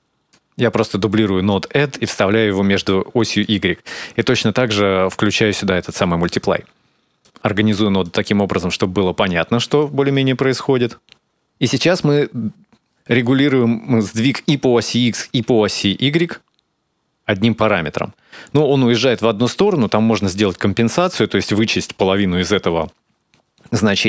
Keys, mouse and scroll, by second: 0.7 middle click, 1.3 click, 5.8 middle click, 7.1 click, 7.4 click, 7.6 click, 7.9 click, 8.3 click, 9.2 shift+right click, 9.6 right click, 10.3 click, 15.5 shift+click.